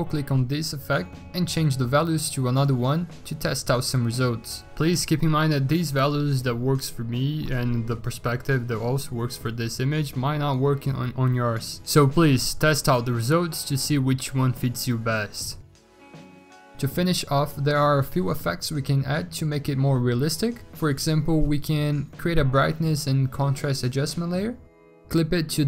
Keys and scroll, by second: 2.2-3.8 typing, 11.0 ctrl+z.